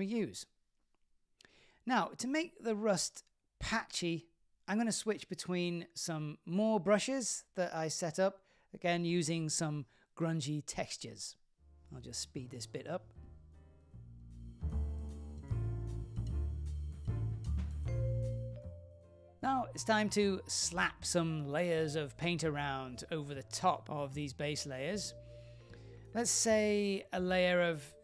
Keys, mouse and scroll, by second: 0.9 click, 2.4 click, 7.6 click, 8.7 click, 9.9 click, 10.8 click, 12.3 click, 12.9 click, 13.3 middle click, 13.5 click, 13.6 shift+middle click, 14.1 super+z, 14.3 click, 14.8 super+z, 14.9 click, 15.6 click, 16.0 shift+f, 16.1 click, 16.5 shift+middle click, 16.7 click, 16.8 click, 16.9 shift+middle click, 17.0 click, 17.1 click, 17.2 click, 17.2 shift+middle click, 17.5-18.3 click, 17.6 click, 17.7 click, 18.0 click, 18.1 click, 18.2 click, 18.5 shift+f, 18.7 click, 18.8 shift+middle click, 23.8 click.